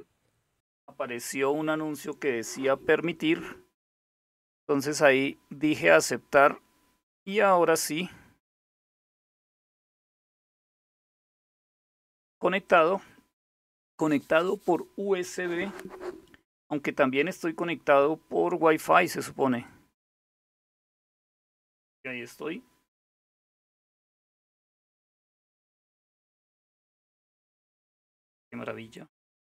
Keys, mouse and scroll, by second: 5.3 click, 8.5 click, 11.1 click, 12.3 click, 19.2 click, 27.5 super+m, 28.9 super+c.